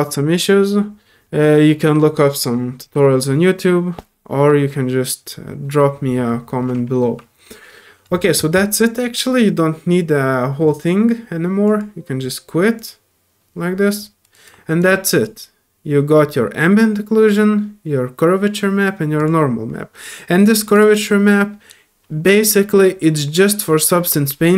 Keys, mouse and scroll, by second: 11.6 click, 12.8 click, 14.2 click, 14.8-15.2 drag, 19.2 click, 20.6 click, 20.7 click, 24.3 middle click, 24.3 scroll down 2.